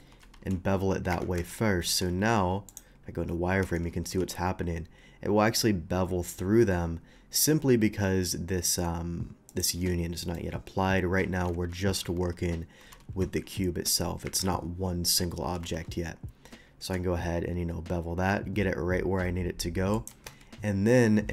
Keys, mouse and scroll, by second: 0.2 ctrl+b, 1.1 Escape, 1.3 Tab, 1.4 Escape, 2.6 alt+v, 2.6 alt+click, 3.6 Tab, 5.4 Tab, 5.4 ctrl+b, 6.6 middle click, 6.6 scroll up 1, 9.5 shift+click, 10.2 shift+middle click, 10.2 scroll up 1, 11.5 ctrl+z, 12.8 ctrl+b, 14.2 Escape, 15.6 ctrl+b, 19.9 shift+click, 20.2 Tab.